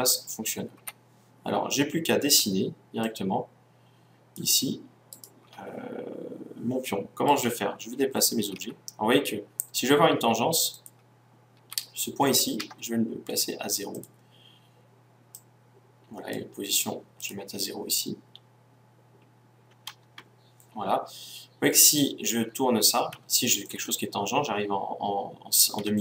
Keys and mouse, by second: 0.7 KP_1, 3.0-5.0 drag, 5.0-6.8 right drag, 7.2-8.5 right drag, 8.5 g, 10.8-12.7 drag, 11.5 g, 13.9-19.0 drag, 21.9-23.7 right drag, 23.4 middle click.